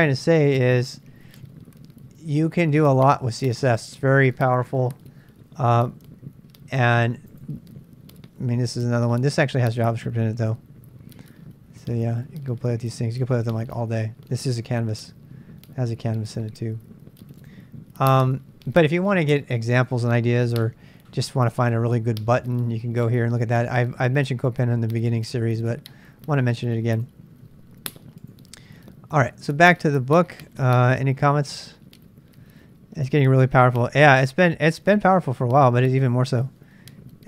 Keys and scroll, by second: 29.2 super+Tab, 29.5 super+Tab.